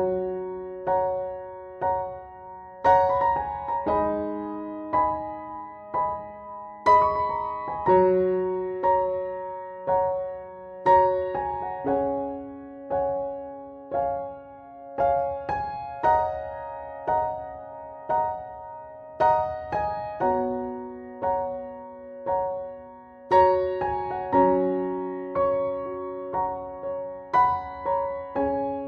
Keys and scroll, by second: 15.3-16.9 typing, 27.4-28.8 typing.